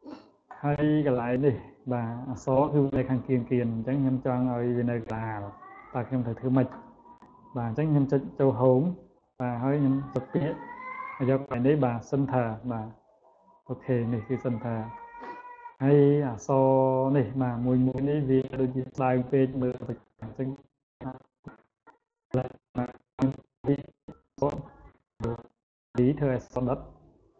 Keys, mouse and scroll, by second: 1.3-3.0 drag, 8.1 click, 12.9 click, 14.7 click, 16.2 click, 17.1 click, 17.5 click, 18.2 click, 18.7 click, 19.1 click, 20.9-22.1 drag, 26.5 click.